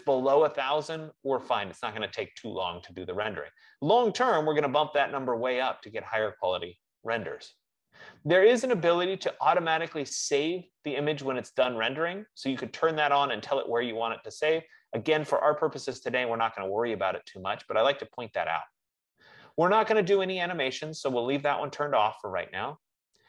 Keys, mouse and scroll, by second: 21.8 click.